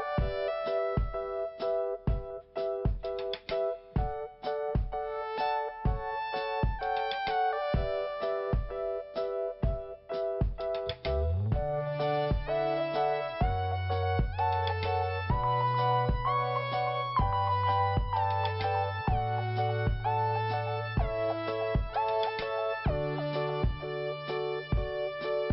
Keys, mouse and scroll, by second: 1.1 scroll down 1, 2.2 scroll up 1, 3.3 click, 4.7 scroll up 1, 5.8 click, 8.1 scroll down 1, 9.6 click, 22.1 scroll up 1, 23.0 click, 23.1 click, 24.3 click.